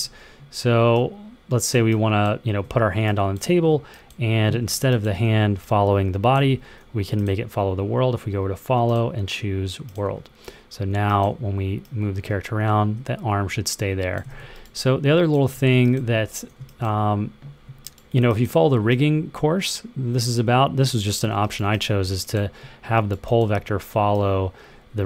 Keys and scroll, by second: 5.0 w, 6.2 super+z, 14.1 super+z, 15.4 w, 16.3 w, 21.6 w.